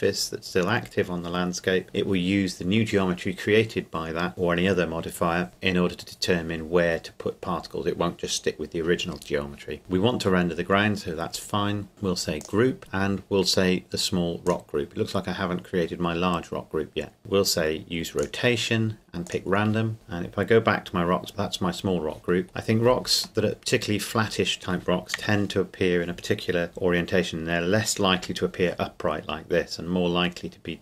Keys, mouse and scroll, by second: 9.8-11.1 scroll down 1, 12.4 click, 18.2 click, 21.3 scroll up 2, 21.5-22.4 scroll down 2, 22.4 scroll up 2, 22.5 KP_1, 23.5-25.2 middle drag, 25.2 KP_1.